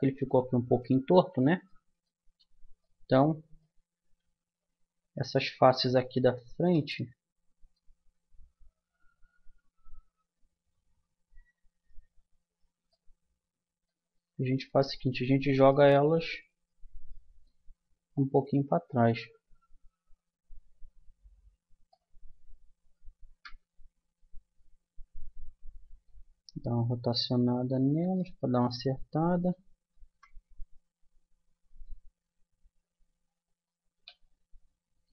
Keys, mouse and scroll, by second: 0.2 Tab, 1.2 click, 1.3 Tab, 4.0 a, 4.4 middle click, 5.0-8.4 drag, 8.4-9.4 middle drag, 11.7-12.9 drag, 12.9-14.3 middle drag, 14.7-17.1 middle drag, 18.1-19.9 drag, 22.4-24.4 middle drag, 23.5 KP_1, 24.6-26.7 middle drag, 26.1 r, 28.7 middle click, 30.1 KP_1, 32.3-34.4 middle drag, 34.9-35.1 middle drag.